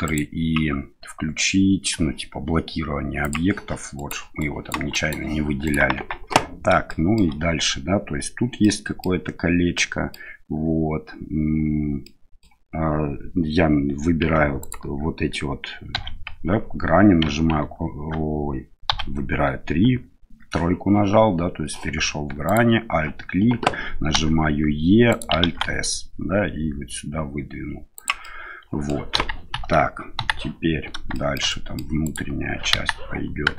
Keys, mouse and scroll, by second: 3.2 click, 3.9 right click, 4.4 right drag, 4.9 right drag, 5.6 right click, 5.9 Tab, 6.8 shift+middle click, 8.6 middle click, 9.7 middle click, 12.0 middle click, 14.6 alt+right click, 15.9 2, 18.9 3, 22.4 alt+right click, 24.1 e, 25.4 alt+s, 28.2 middle click, 30.1 KP_1, 31.1 shift+middle click, 31.4 middle click, 32.0 right click, 32.7 KP_1.